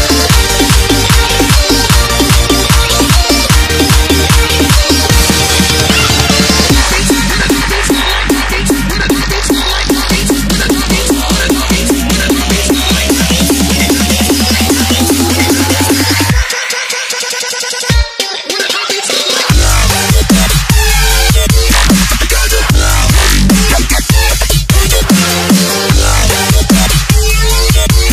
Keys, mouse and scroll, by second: 1.6 click, 2.9 alt+Tab, 3.7 click, 4.2 alt+Tab, 4.7 ctrl+v, 5.3 click, 5.5 Return, 6.1 click, 6.3 Return, 7.1 click, 7.7 t, 8.1 click, 9.1 Return, 9.3 Down, 9.7 alt+scroll down 1, 10.3 alt+scroll up 1, 10.9 scroll up 1, 14.3 click, 18.3 scroll up 1, 19.4 click, 20.7 scroll up 1, 22.5 click, 23.5 c, 24.0 click, 24.5 ctrl+v, 26.5 ctrl+t, 27.5 ctrl+0.